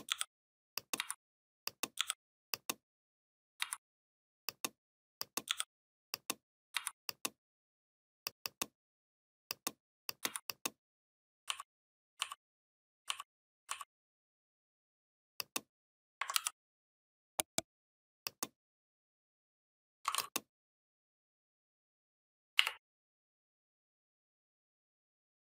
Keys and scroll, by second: 0.8 v, 1.8 i, 3.4 v, 5.3 i, 6.6 v, 10.1 v, 16.2 ctrl+g, 22.4 Up.